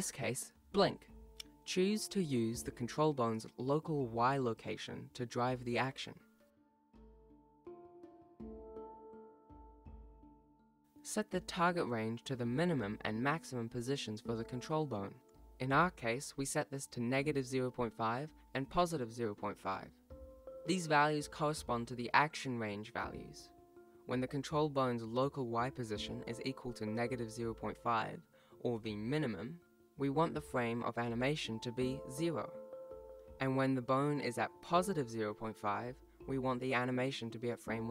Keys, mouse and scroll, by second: 1.3 click, 8.0 click, 11.2-12.4 scroll down 2, 12.4 click, 18.8 click, 24.4 click, 27.2 KP_0, 32.7 click.